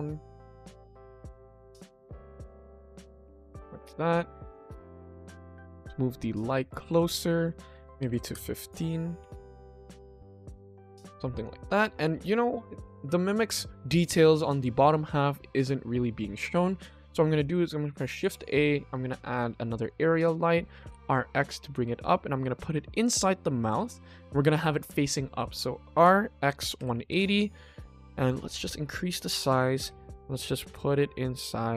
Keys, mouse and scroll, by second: 3.8 click, 4.4 click, 5.1 g, 7.4 click, 7.7 click, 9.2 s, 10.5 click, 10.8 ctrl+s, 12.0 ctrl+s, 18.0 shift+a.